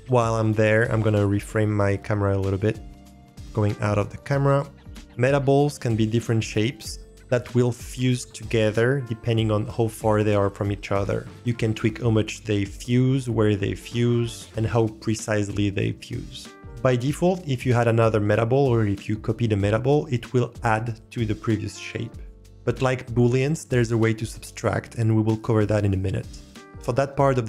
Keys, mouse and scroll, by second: 2.2-2.7 shift+middle drag, 2.8-3.2 ctrl+middle drag, 3.8-4.8 drag.